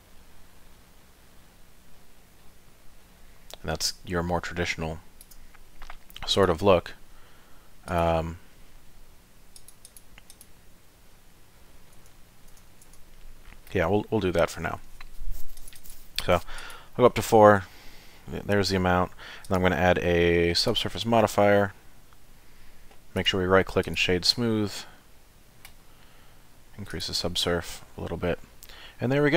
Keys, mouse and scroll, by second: 6.3 click, 7.9 click, 9.6 click, 9.9 click, 10.3 click, 11.3 middle click, 12.0 Tab, 12.4 middle click, 12.9 Tab, 13.4 middle click, 15.6 click, 15.8 click, 16.6 click, 19.4 click, 23.9 right click, 25.2 middle click, 26.9 click, 27.6 middle click.